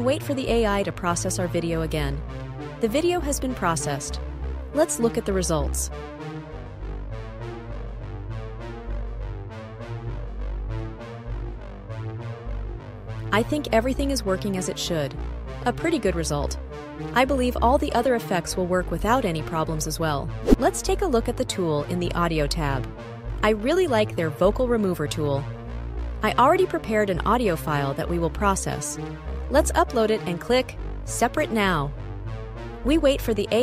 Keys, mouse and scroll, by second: 5.9 click, 9.7-11.7 drag, 23.2 click, 25.3 click, 27.3 super+b, 30.9 click.